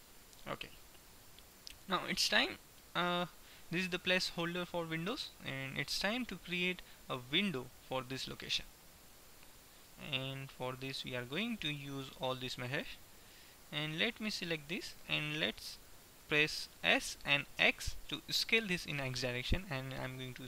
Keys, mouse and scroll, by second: 0.4 typing, 1.5-4.4 middle drag, 7.5 middle click, 12.2 alt+h, 12.5-13.9 middle drag, 13.9 right click, 16.5 s.